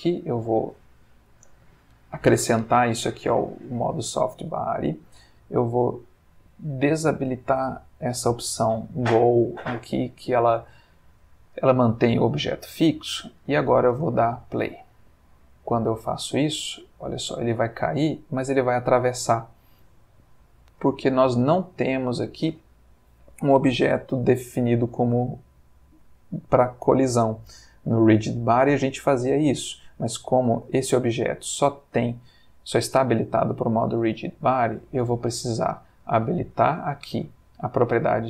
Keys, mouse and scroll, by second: 6.9 click, 10.2-11.0 middle drag, 11.1 ctrl+middle click, 12.5-13.6 middle drag, 13.9 space, 19.5 Escape, 30.7 click, 32.7 click, 36.5 click.